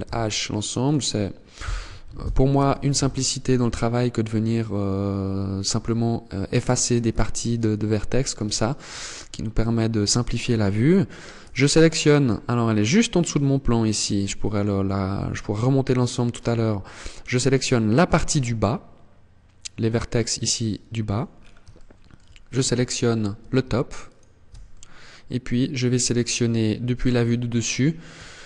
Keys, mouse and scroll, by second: 0.3 right click, 1.5 ctrl+l, 2.1 h, 2.5 middle click, 3.1-3.5 scroll down 4, 3.6 middle click, 6.6 KP_1, 7.9 shift+middle click, 8.5-8.9 scroll up 6, 9.2 shift+middle click, 9.9 scroll up 2, 11.3 alt+right click, 11.9 middle click, 20.1 middle click, 20.8-21.2 scroll down 4, 21.2 shift+middle click, 23.5 alt+shift+right click, 24.2 middle click, 26.3 KP_7, 27.0 scroll down 6, 27.7 shift+middle click, 28.3-28.4 scroll up 8.